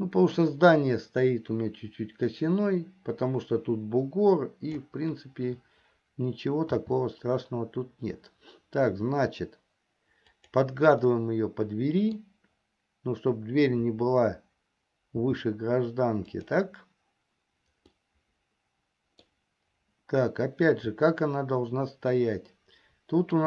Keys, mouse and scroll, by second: 7.2 s, 11.7-12.9 middle drag, 15.8 s, 18.4-19.9 middle drag, 19.9 scroll down 1, 21.5-23.4 shift+middle drag.